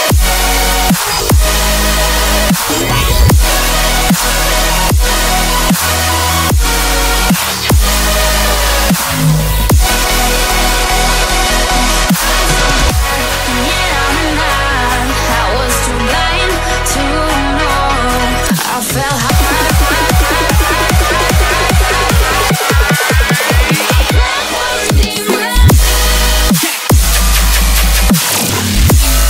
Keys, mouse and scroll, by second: 0.3 shift+click, 5.5 shift+click, 6.1 shift+click, 7.8 shift+click, 10.0 shift+click, 11.6 shift+click, 12.3 shift+click, 14.1 shift+middle click, 17.1 shift+click, 17.6 shift+click, 18.7 shift+click, 19.7 shift+click, 21.0 shift+click, 21.6 shift+click, 22.6 shift+click, 23.2 shift+click, 24.2 shift+click, 25.5 shift+click, 26.2 shift+click, 27.7 shift+click, 28.3 shift+click.